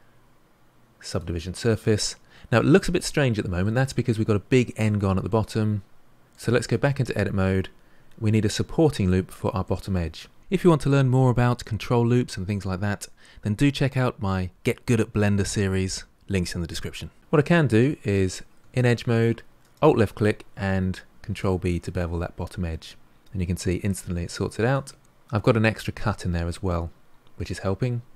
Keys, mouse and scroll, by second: 1.2-1.9 drag, 2.7-6.6 middle drag, 6.6 Tab, 9.8-18.6 middle drag, 18.6 2, 19.6 alt+click, 21.1 ctrl+b, 25.0-28.1 middle drag.